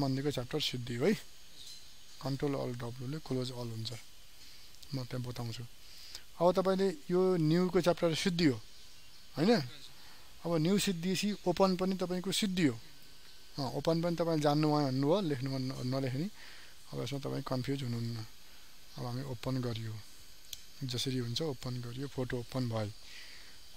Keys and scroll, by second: 2.1 ctrl+alt+w.